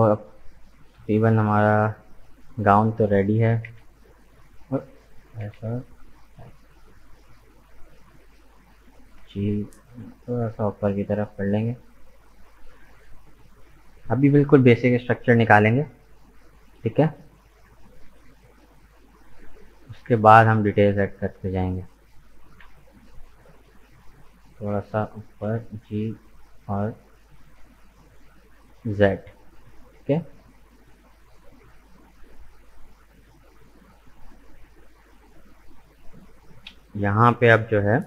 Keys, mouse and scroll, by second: 3.5 s, 5.3 s, 8.9 g, 12.3 Tab, 12.4 right click, 12.8-14.9 middle drag, 14.9 KP_1, 16.5 shift+middle click, 17.1 scroll up 2, 17.6 right click, 18.1 Tab, 18.4-21.1 middle drag, 21.1 right click, 21.8 shift+right click, 22.5 KP_1, 23.8 g, 25.5 g, 29.2-31.3 middle drag, 31.3 scroll down 2, 31.6-34.8 middle drag.